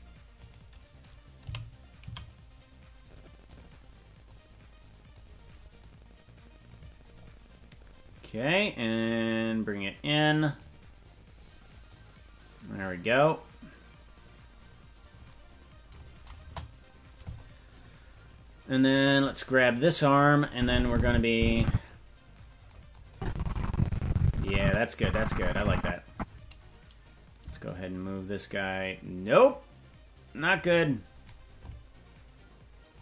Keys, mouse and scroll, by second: 1.4 g, 4.2 click, 5.7 click, 7.1-7.7 scroll up 3, 7.7-9.0 scroll down 1, 9.0-10.6 drag, 9.0-9.8 scroll down 1, 11.9 click, 13.2-13.9 scroll up 2, 13.9-15.3 scroll down 2, 16.4 KP_0, 17.3-18.0 scroll up 3, 19.0 right click, 20.5-21.7 drag, 23.1-26.1 drag, 27.6-33.0 shift+drag.